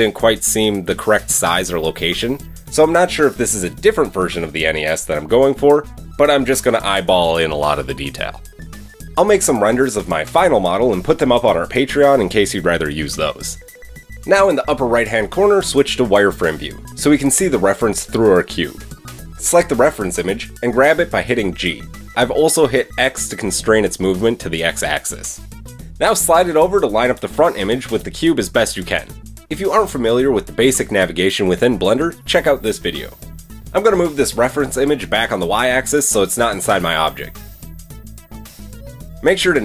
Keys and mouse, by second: 10.0 click, 10.1-18.4 right drag, 18.4 shift+click, 18.6 right click, 18.7-24.9 drag, 19.9 g, 24.9-29.0 right drag, 30.6 click, 33.5-38.6 middle drag, 35.0 g, 38.0 KP_1.